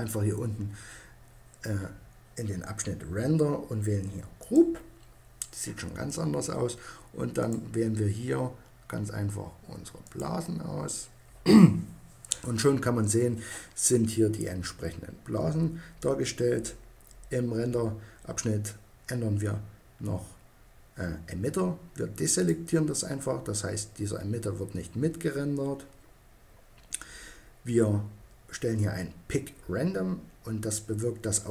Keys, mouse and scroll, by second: 3.8-5.6 drag, 6.8-8.6 drag, 21.8-23.4 drag.